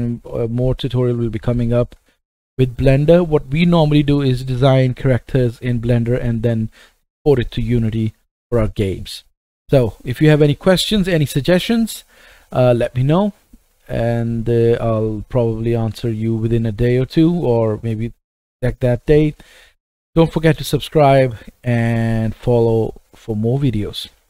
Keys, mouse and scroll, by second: 5.3-6.2 middle drag, 6.6-7.7 middle drag.